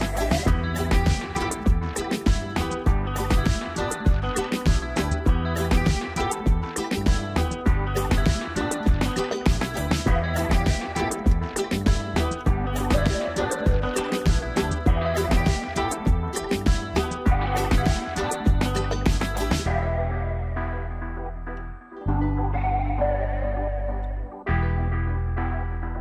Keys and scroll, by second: 12.5 ctrl+t.